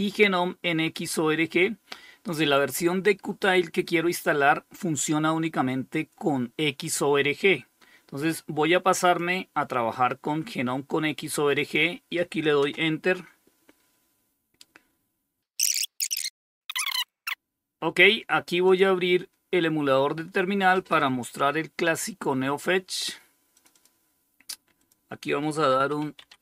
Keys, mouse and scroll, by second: 8.2 click, 10.7 click, 11.9 Return, 17.8 click, 22.7 click, 24.0 click, 24.7-26.0 typing, 26.2 Tab.